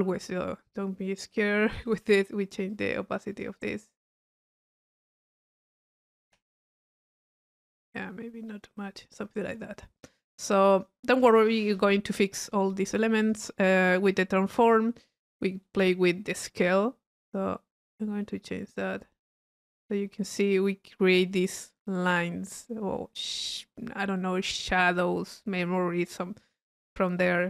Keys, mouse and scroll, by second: 1.3 click, 1.8 click, 2.7-4.3 drag, 4.8 click, 6.2 click, 7.9 click, 10.0 click, 13.2 click, 13.5 middle click, 14.0 click, 14.3 middle click, 14.5 click, 14.8 middle click, 15.1 click, 15.6-20.5 middle drag, 21.3 drag.